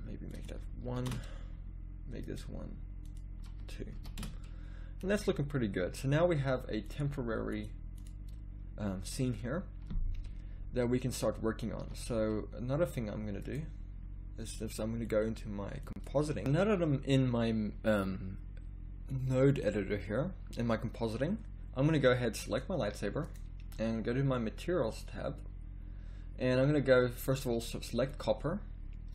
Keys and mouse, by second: 0.3-5.0 drag, 5.0-6.9 middle drag, 6.9-10.9 drag, 11.8 z, 12.0 z, 16.4 z, 28.1-29.1 drag.